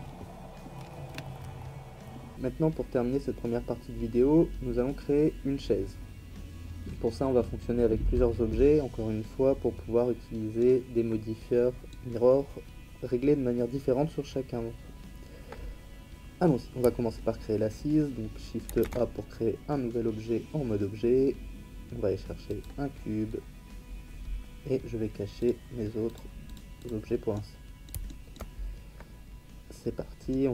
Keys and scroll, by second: 1.1 Tab, 18.7 shift+a.